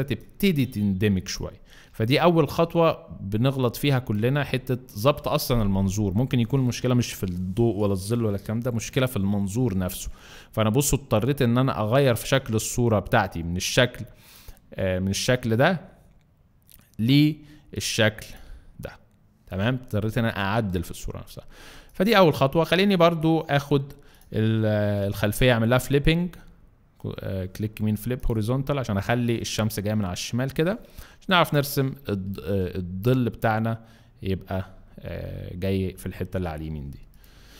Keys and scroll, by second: 1.9 v, 2.5 shift+v, 4.2 alt+shift+v, 21.7 alt+space, 24.8 ctrl+t, 33.7 Return.